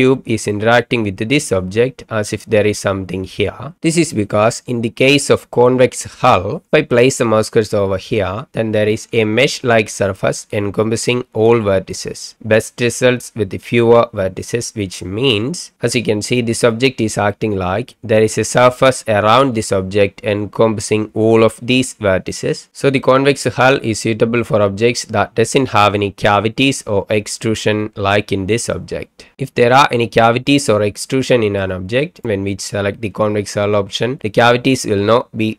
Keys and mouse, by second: 2.1-3.8 drag, 22.7 n, 26.3 middle click, 30.1-31.6 middle drag, 34.5-35.2 middle drag.